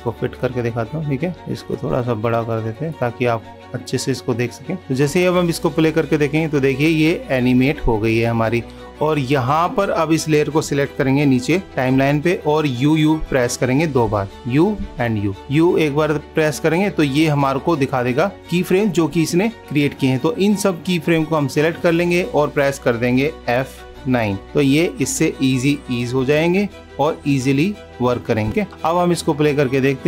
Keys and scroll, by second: 28.6 super+=.